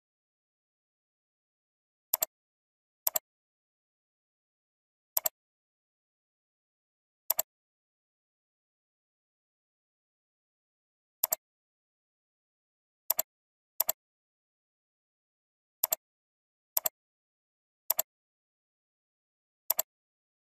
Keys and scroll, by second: 19.1 ctrl+v.